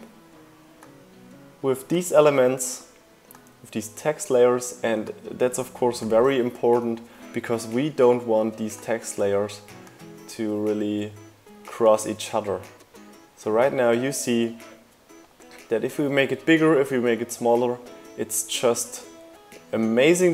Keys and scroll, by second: 20.0 super+z.